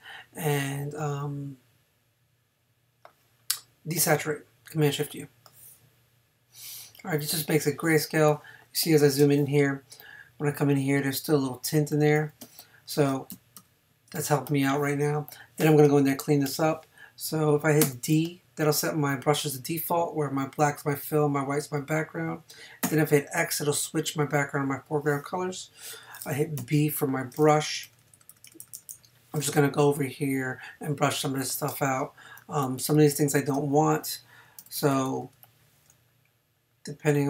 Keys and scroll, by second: 7.8 space, 12.4 space, 13.7 super+0, 15.6 space, 17.8 d, 22.8 x, 26.6 b, 27.9 ], 31.7 space, 34.6 [.